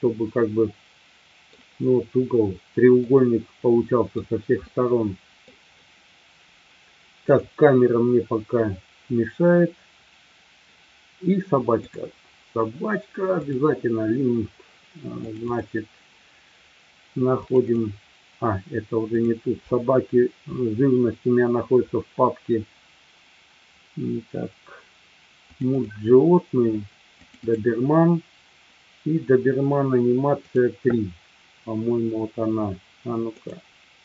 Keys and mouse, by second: 3.1-4.2 middle drag, 4.6 middle click, 7.2 click, 11.7-13.7 drag.